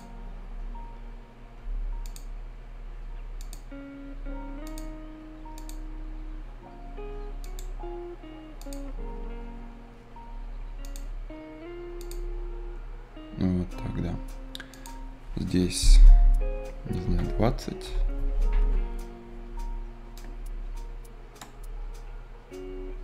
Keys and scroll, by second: 16.9 b, 17.8 Return.